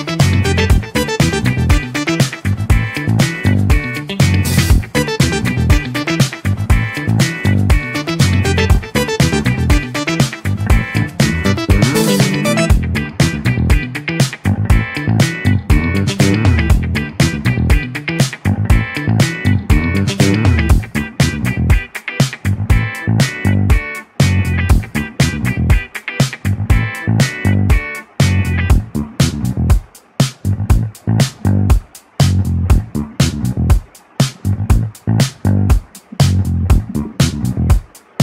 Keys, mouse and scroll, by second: 5.8-9.0 drag, 25.2 click, 25.5 click, 27.3 drag, 28.0-36.1 drag.